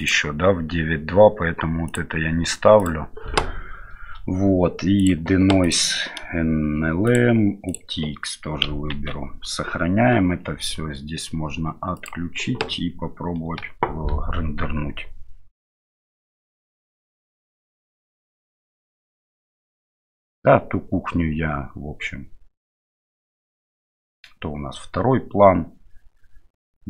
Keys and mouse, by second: 5.0 click, 5.6 click, 7.0 click, 8.9 ctrl+s, 12.0 click.